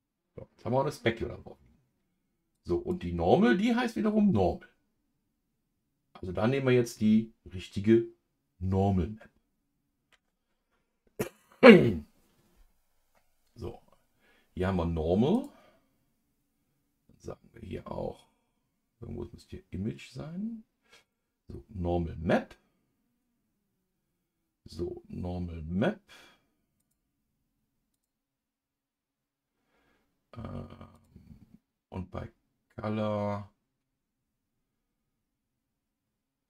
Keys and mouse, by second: 15.3-21.1 drag, 27.0-28.0 drag, 31.1-35.1 drag.